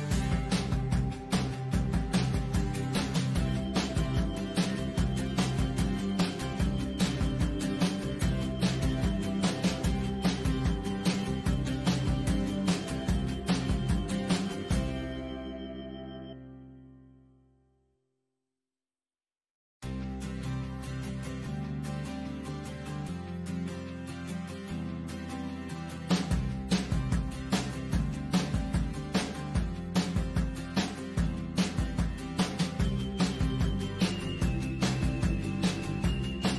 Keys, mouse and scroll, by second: 0.3 click, 0.4 click, 0.7 click, 0.8 click, 1.2 click, 1.5 click, 1.7 click, 2.5 click, 2.7 click, 3.2 click, 3.7 click, 4.0 click, 4.5 click, 4.9 click, 5.2 click, 6.0 click, 6.4 click, 6.8 click, 7.0 click, 7.4 click, 7.8 click, 8.1 click, 8.7 click, 8.8 click, 9.0 click, 9.5 click, 9.8 click, 10.1 click, 10.3 click, 10.7 click, 10.8 click, 11.0 click, 11.1 click, 11.4 click, 11.6 click, 12.0 click, 12.2 right click, 12.8 click, 13.8 click, 14.5 click, 14.7 click, 15.2 click, 15.3 click, 15.8 click, 16.1 click, 16.7 click, 17.3 click, 17.9 click, 18.0 click, 19.5 click, 19.8 click, 20.5 click, 20.8 click, 26.8 z, 27.0 click, 27.5 click, 27.9 click, 28.4 click, 28.5 click, 28.7 click, 28.9 click, 29.2 click, 29.5 click, 29.9 click, 30.2 [, 30.6 scroll up 2, 30.6 click, 31.6 click, 32.1 l, 32.6 click, 33.1 click, 33.6 click, 33.8 click, 34.4 click, 35.2 click, 35.3 i, 35.4 click, 35.7 click, 36.4 click.